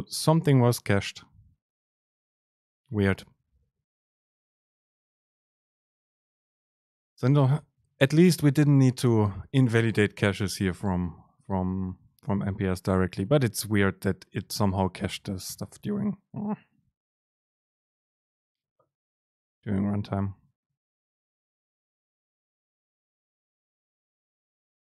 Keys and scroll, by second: 7.0 shift+Down, 14.7 shift+Down, 15.2 BackSpace, 17.6 super+z.